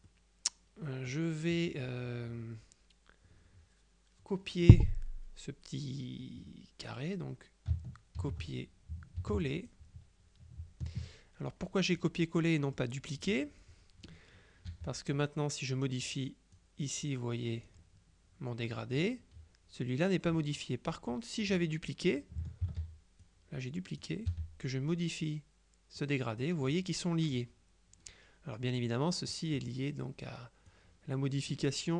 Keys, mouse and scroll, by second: 8.3 ctrl+c, 9.3 ctrl+v, 9.8-12.6 ctrl+drag, 12.4 right click, 14.8 g, 16.1 click, 21.0 click, 22.0 click, 22.7 ctrl+d, 23.3 ctrl+click, 24.4 g, 25.3 click, 28.9 click, 30.8 click.